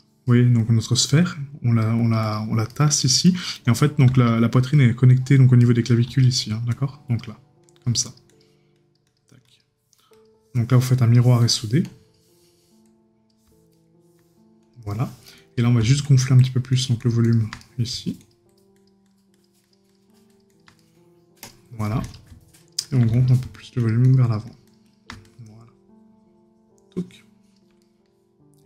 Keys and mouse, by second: 0.3 right click, 2.7 right click, 5.6 right click, 13.7 right click, 17.6 right click, 20.8 right click, 27.8 right click.